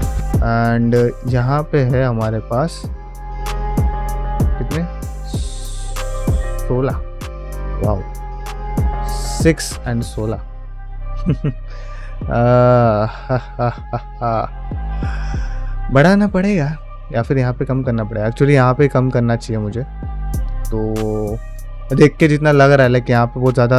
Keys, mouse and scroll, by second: 0.8 click, 1.1 Tab, 1.5 alt+z, 2.0 middle click, 3.0 alt+click, 8.5 ctrl+middle click, 8.7 ctrl+Tab, 10.4-14.9 middle drag, 15.3 ctrl+middle click, 15.6-16.3 middle drag, 16.6 shift+middle click, 16.9 middle click, 17.6 middle drag, 17.9-23.7 ctrl+middle drag.